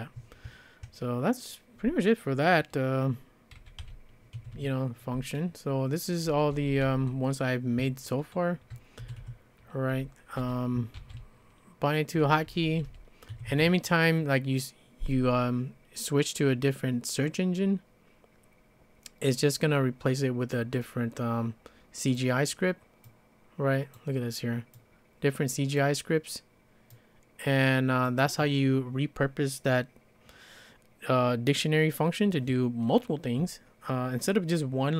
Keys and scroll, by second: 3.3-6.8 typing, 4.3 Escape, 4.5 Escape, 9.0 Escape, 9.9-13.7 typing, 13.3 Escape.